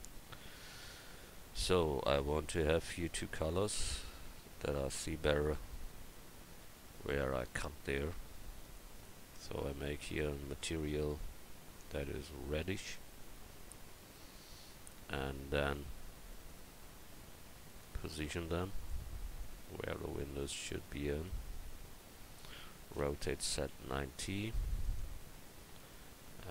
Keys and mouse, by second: 17.1 s, 23.0 r.